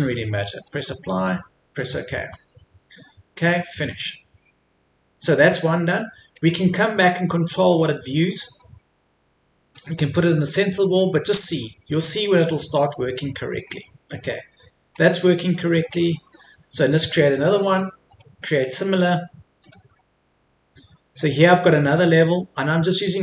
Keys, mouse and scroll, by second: 5.3 middle click, 6.0-6.4 scroll up 1, 7.7-9.3 drag, 10.4-11.1 scroll down 1, 12.8 middle click, 13.6-14.4 scroll up 1, 15.0 scroll down 1, 15.6 middle click, 17.6 click, 18.1 right click, 19.6-23.2 drag.